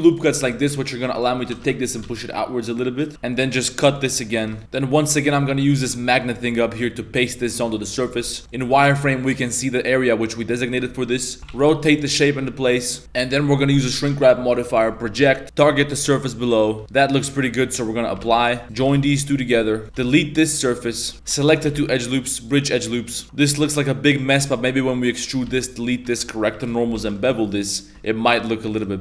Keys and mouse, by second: 0.3 2, 0.5 right click, 1.2 ctrl+right click, 1.4 g, 3.1 ctrl+r, 3.1 1, 3.1 2, 3.5 click, 3.9 ctrl+r, 4.0 click, 4.3 a, 4.6-5.2 drag, 6.0 middle click, 6.3 middle drag, 7.9 middle drag, 8.2 shift+middle drag, 8.4 z, 8.5 middle click, 10.7 shift+middle drag, 11.4 ctrl+z, 11.4 r, 13.0 click, 14.2 click, 16.2-16.6 middle drag, 16.8 z, 18.2 ctrl+a, 18.6 middle click, 18.9 ctrl+j, 19.0 Tab, 19.4 2, 19.8 3, 20.0 x, 21.1 2, 21.3 ctrl+shift+z, 21.4 alt+shift+right click, 21.7 w, 23.1 middle click, 23.2 Tab, 23.5 3, 23.5 right click, 23.7-24.2 middle drag, 24.5-27.0 typing, 27.2 alt+right click, 27.4 middle drag.